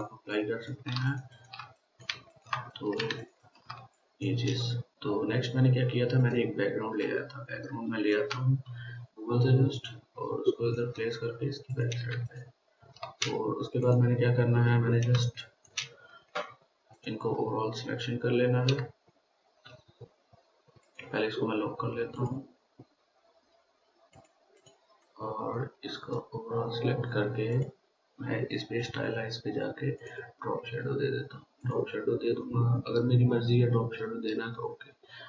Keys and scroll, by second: 12.6 ctrl+space, 13.1 ctrl+space, 13.1 ctrl+space, 13.7 ctrl+space.